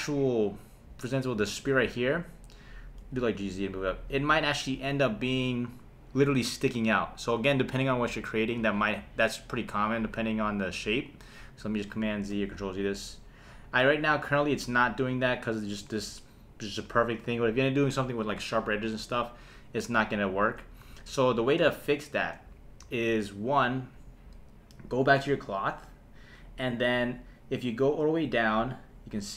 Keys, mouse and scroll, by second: 1.5 click, 3.0 g, 3.9 click, 12.3 super+z, 13.7 click, 14.3 space, 15.1 space, 20.3 shift+Left, 20.8 Left.